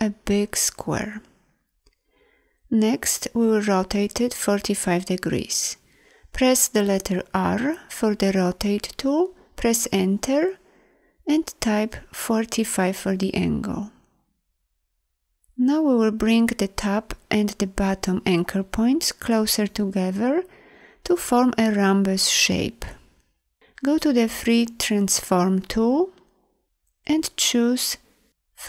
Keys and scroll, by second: 6.5 r, 9.6 Return, 22.7 e.